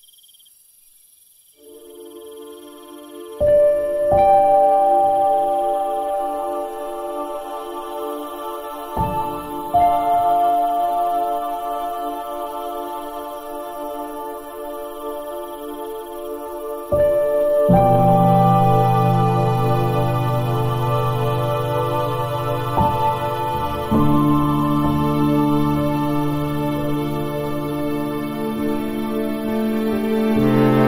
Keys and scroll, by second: 0.3 l, 0.8 BackSpace, 0.9 super+d, 1.3 s, 1.9 super+z, 3.7 v, 4.3 alt+s, 5.8 e, 6.7 super+0, 6.8 super+Tab, 9.5 super++, 9.6 super+space, 10.5 i, 10.9 i, 11.1 super+d, 14.9 super+c, 15.5 v, 16.1 shift+super+t, 17.2 Return, 17.5 Tab, 20.2 super+c, 21.8 shift+super+t, 24.0 space, 26.1 Down, 27.0 Return, 29.2 e.